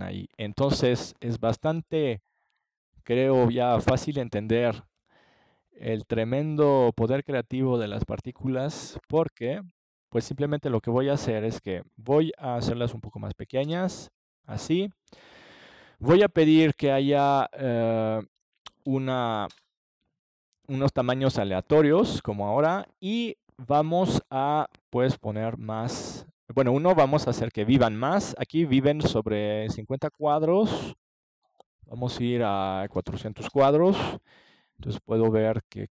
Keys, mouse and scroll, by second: 0.5-2.3 drag, 6.2-8.0 drag, 12.2-15.3 middle drag, 15.3-19.0 drag, 22.9 KP_0, 24.7-26.3 drag, 31.5 click, 32.2 KP_0, 35.5 KP_0.